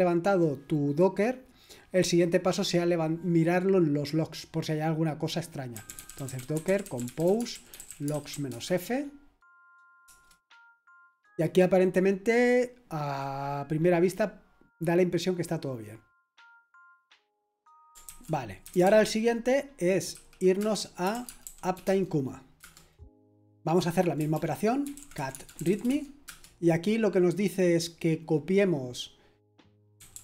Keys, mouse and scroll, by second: 5.5-8.8 typing, 10.0 typing, 11.6 typing, 18.0 ctrl+c, 18.4-22.2 typing, 20.6 Return, 22.6 Return, 24.2-27.0 typing, 29.7-30.2 typing.